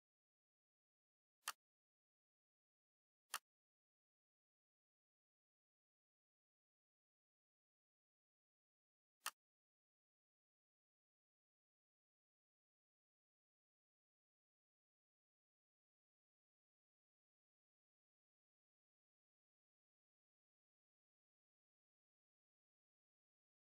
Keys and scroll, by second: 0.2 Up, 6.1 ctrl+d, 15.1 ctrl+d, 20.4 ctrl+d.